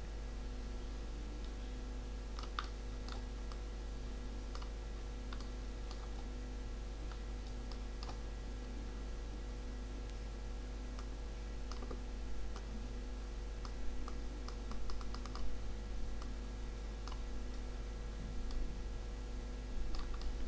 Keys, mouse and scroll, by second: 2.6 middle click, 4.7 click, 5.4 middle click, 7.2-8.3 middle drag, 9.5-11.0 middle drag, 11.0-12.5 drag, 13.3 click, 14.4-15.7 drag, 18.0-20.4 middle drag.